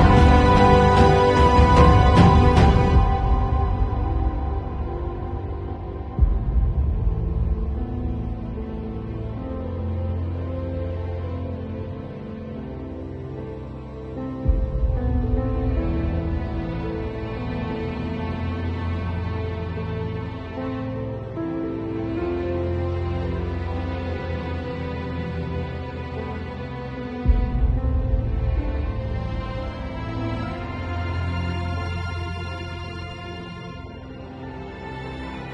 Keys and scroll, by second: 0.6 ], 1.8 x, 2.2 space, 2.5 x, 2.8 [, 4.0 space, 6.2-10.8 typing, 12.5 ], 14.9 ], 15.3 [, 16.3 space, 18.9 [, 20.9 [, 24.4 space, 27.3 space, 29.8 space, 30.9 space, 32.1 space, 33.1 space, 33.9 space.